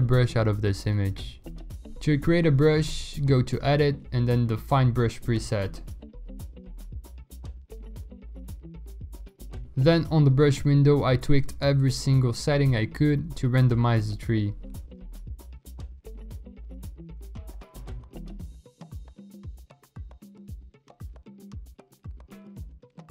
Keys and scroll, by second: 2.1 v, 4.1 Return, 7.6-10.7 typing, 12.1 ctrl+z, 12.5 0, 13.4 ctrl+z, 17.4 ctrl+z.